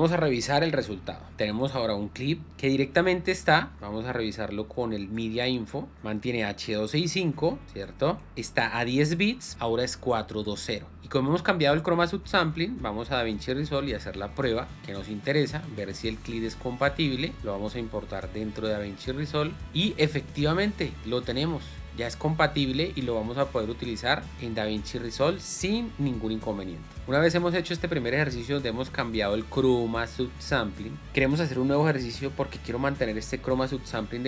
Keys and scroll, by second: 17.2 alt+Tab.